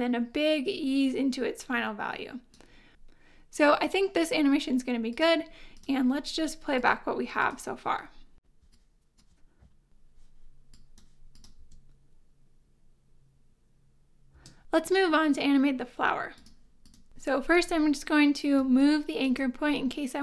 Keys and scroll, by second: 8.5 space, 11.6 space, 14.3 space, 18.6 space.